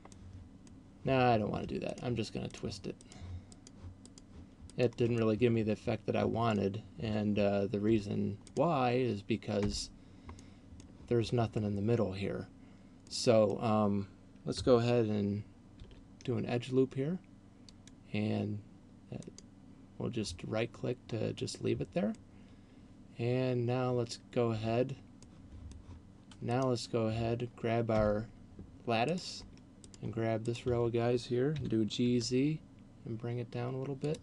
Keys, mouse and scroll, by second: 0.4 middle click, 2.1 shift+right click, 2.6 shift+right click, 3.1 shift+right click, 3.4 shift+right click, 4.1 shift+right click, 4.6 shift+right click, 5.1 middle click, 7.9 Tab, 8.4 right click, 9.9 Tab, 10.4 middle click, 13.1 middle click, 15.9 ctrl+r, 19.4 right click, 21.4 middle click, 24.6 Tab, 25.4 middle click, 26.6 right click, 27.9 Tab, 29.1 right click, 30.1 shift+right click, 31.9 g, 34.1 click.